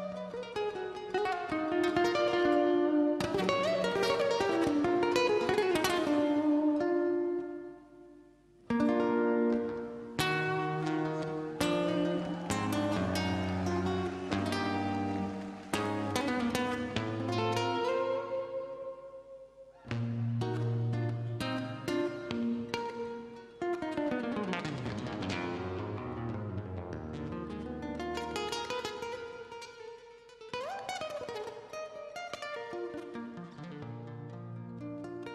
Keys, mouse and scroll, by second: 0.7-7.2 drag, 7.2 right click, 7.7 click, 13.1-13.5 scroll down 1, 13.5 scroll up 1, 14.7 click, 16.2 right click, 21.3 click, 22.6 right click, 24.0 click, 26.5 KP_4, 28.4 scroll down 1, 29.2 right click, 29.7 click, 30.4 scroll down 1, 31.4-35.2 drag.